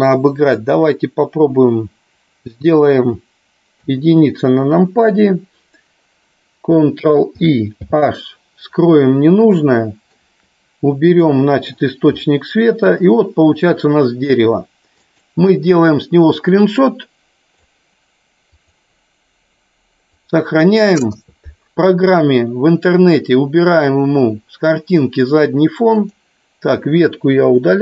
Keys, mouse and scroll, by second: 3.8 KP_1, 7.5 ctrl+i, 8.0 h, 9.5-10.1 shift+middle drag, 12.2-12.8 shift+middle drag.